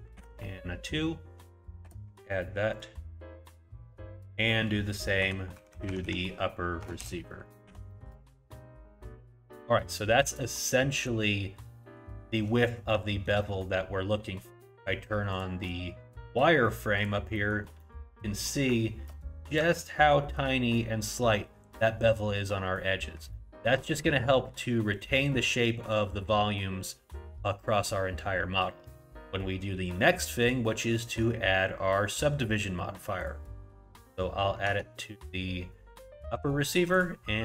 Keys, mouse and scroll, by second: 2.7 click, 4.2 click, 5.7 Right, 5.9 Right, 9.8 shift+middle click, 10.5-10.9 scroll up 1, 10.9 middle click, 12.3-12.8 scroll up 2, 13.1 shift+middle click, 14.3-15.3 scroll down 1, 15.3 click, 15.3 scroll down 1, 17.4 middle click, 17.8 shift+middle click, 18.3 scroll up 2, 19.4 scroll up 1, 19.8 shift+middle click, 21.9-22.8 scroll down 2, 22.9 scroll down 1, 23.3 shift+middle click, 29.1-29.5 scroll down 1, 30.4 click, 34.8 Tab, 36.9 click.